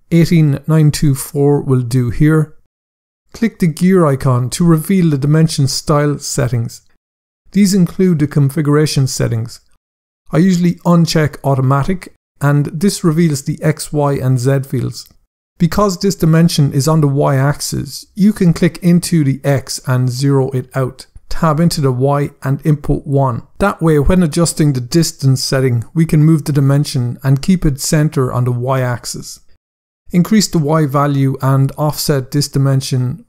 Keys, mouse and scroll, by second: 0.2-1.3 typing, 2.0 Return, 3.4 click, 12.2 click, 12.9 scroll down 1, 18.4 click, 19.4 typing, 20.9 Tab, 21.4-21.9 typing, 23.3 Return, 25.8 click, 32.2 click.